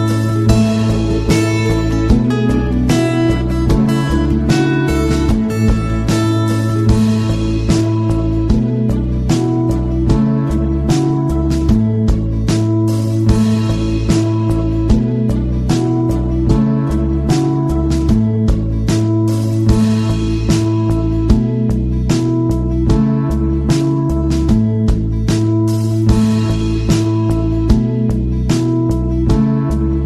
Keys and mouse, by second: 0.0-0.3 middle drag, 1.2 middle click, 1.4 s, 2.4 g, 4.4-6.2 drag, 6.2-6.8 middle drag, 8.2-9.6 right drag, 9.6 middle click, 9.9 g, 11.3 r, 12.0 g, 12.7 middle click, 13.7 shift+d, 14.4 r, 15.8 r, 17.1-17.4 middle drag, 17.7 g, 19.1 middle click, 19.5 middle click, 20.3 middle click, 21.0 right drag, 21.9-25.5 right drag, 25.5-25.8 middle drag.